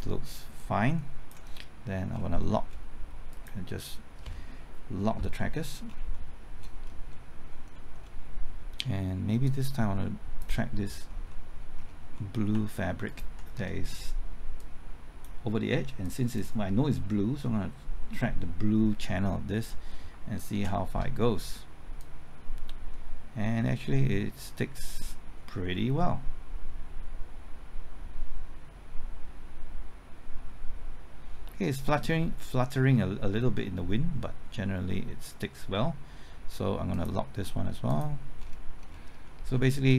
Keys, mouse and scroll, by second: 2.1 scroll down 1, 2.4 middle click, 3.3 click, 5.5-6.1 scroll down 1, 6.1 middle click, 6.7-7.1 scroll up 1, 7.1-8.8 middle drag, 9.4-10.8 drag, 10.8-11.3 scroll up 1, 11.3 middle click, 11.7-12.1 scroll up 1, 12.1 middle click, 13.0 ctrl+click, 14.6-15.8 drag, 20.5 ctrl+t, 22.0-35.8 drag, 38.4-39.5 scroll down 1, 39.5 middle click.